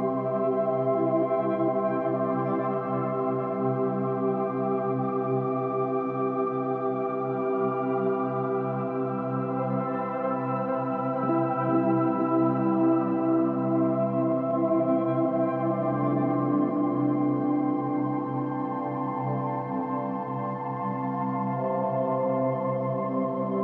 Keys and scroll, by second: 0.9 ctrl+z, 3.1 ctrl+z, 5.9 ctrl+z, 9.1 v, 13.3 ctrl+z, 17.9 space.